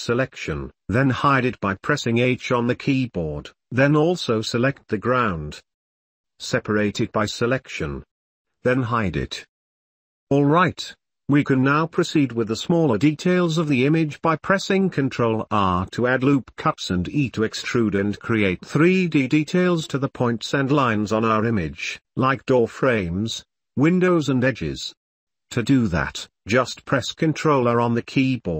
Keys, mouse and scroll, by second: 0.0 Tab, 1.2 Tab, 2.9 h, 4.6 n, 6.8 p, 9.6 click, 10.8 middle click, 11.1 click, 11.3 middle click, 11.9 shift+middle click, 12.4-13.6 shift+middle drag, 13.9 ctrl+r, 15.5 shift+click, 16.1 ctrl+r, 17.8 shift+click, 18.0 middle click, 18.1 click, 18.3 middle click, 18.7 ctrl+r, 20.9 KP_1, 21.9 a, 22.2 ctrl+r, 23.6 shift+middle click, 24.3 middle click, 25.0 ctrl+z, 25.1 ctrl+z, 25.8 a, 26.0 middle click, 26.4 shift+middle click, 27.2 ctrl+r.